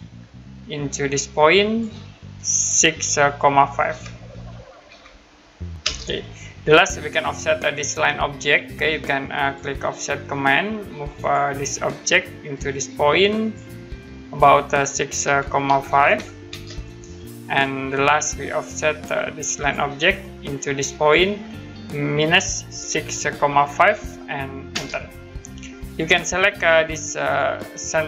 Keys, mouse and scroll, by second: 1.3 click, 3.8 6, 5.8 Return, 9.4 click, 11.2 click, 15.2-16.5 typing, 17.9 click, 19.6 click, 22.2 typing, 24.7 Return, 27.2 click.